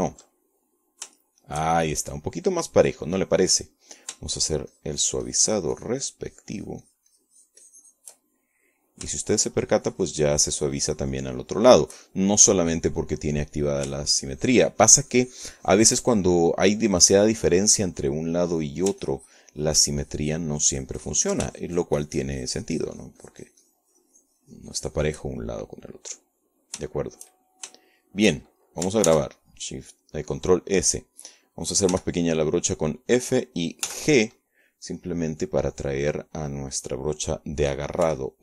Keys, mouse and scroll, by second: 2.1 ctrl+middle click, 2.2 ctrl+click, 3.0-4.1 shift+drag, 4.5-5.8 middle drag, 6.2-10.0 shift+drag, 10.4 middle click, 10.9-13.8 shift+drag, 14.5-15.6 middle drag, 15.8-18.6 shift+drag, 20.0 middle click, 20.8-23.3 ctrl+drag, 25.9-27.1 shift+drag, 27.5-28.6 middle drag, 28.6-30.2 shift+drag, 30.9 ctrl+s, 31.6 click, 33.8 f, 35.0 click, 35.7 g.